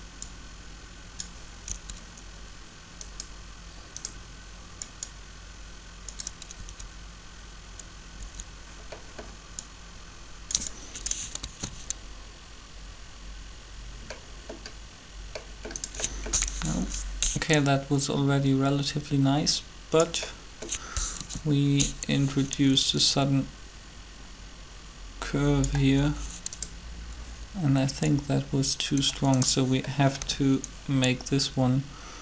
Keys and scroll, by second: 1.7 Up, 6.4 Up, 11.3 alt+a, 20.9 7, 30.2 b.